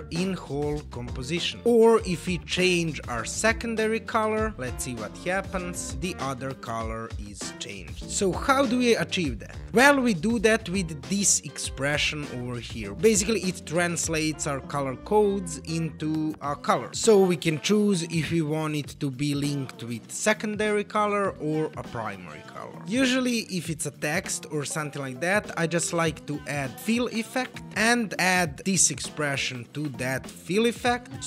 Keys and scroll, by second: 4.2 super+v.